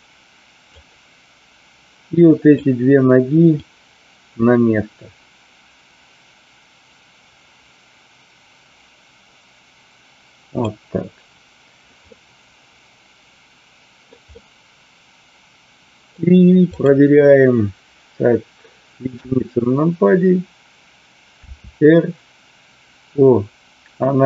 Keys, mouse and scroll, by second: 2.2 click, 3.6-10.7 drag, 12.1-14.2 middle drag, 14.3-16.1 middle drag, 16.7 click, 19.0 KP_1, 21.5 r.